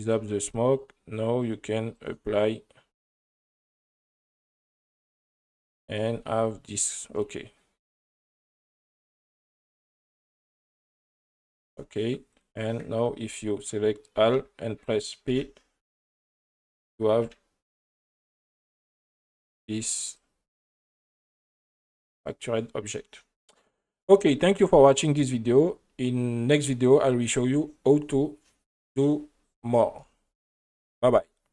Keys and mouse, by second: 0.7 click, 1.4 right click, 3.3 click, 4.1-4.7 drag, 5.2 right click, 5.9 right click, 6.3 Tab, 10.6 right click, 12.3 right click, 14.3 a, 15.3 p, 17.2 Tab, 17.6 right click, 18.4 right click, 19.0 r, 19.8 click, 20.1 right click, 20.9 right click.